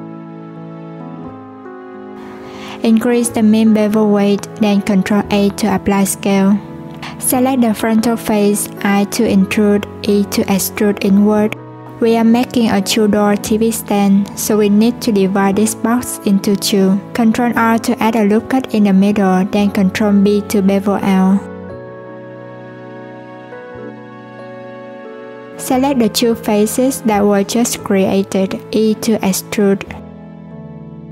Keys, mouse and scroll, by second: 0.9 Tab, 1.4 3, 2.3-3.8 drag, 5.3 Tab, 6.5 ctrl+a, 7.5 Tab, 15.7 ctrl+r, 22.1-23.4 scroll up 1, 23.4 click, 24.3-25.6 scroll up 4, 25.6 3, 26.5 click, 27.7 shift+click, 28.1 e.